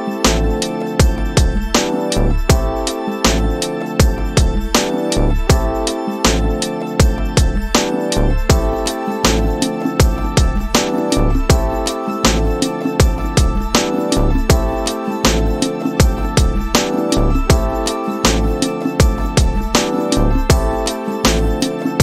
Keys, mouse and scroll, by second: 13.1-14.5 drag, 16.3 click, 19.1 a.